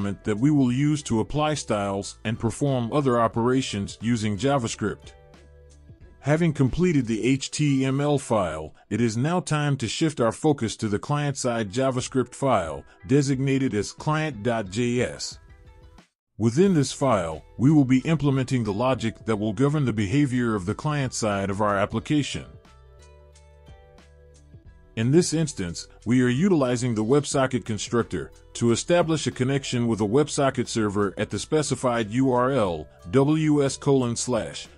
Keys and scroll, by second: 24.7 ctrl+v.